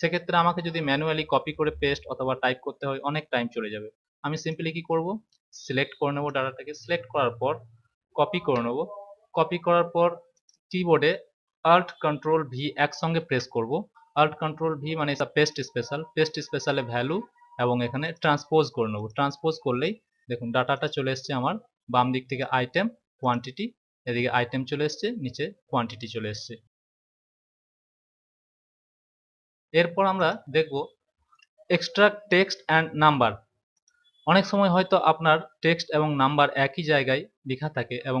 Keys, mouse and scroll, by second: 4.4 click, 8.3 ctrl+c, 10.3 click, 13.1 ctrl+alt+v, 16.1 click, 18.0 click, 20.6 click, 22.2 click, 30.1 click, 33.7 click.